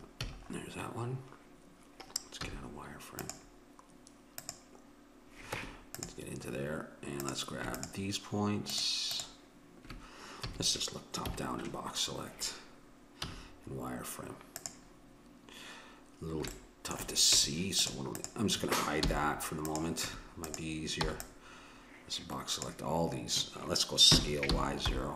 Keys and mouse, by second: 0.2 a, 0.5-2.4 middle drag, 2.4 z, 4.4 click, 5.5 Tab, 7.2-10.9 drag, 10.5 a, 11.2 KP_7, 13.3 z, 17.4 Tab, 18.2-19.7 right drag, 19.0 h, 20.1 Tab, 21.1 b, 24.1 s.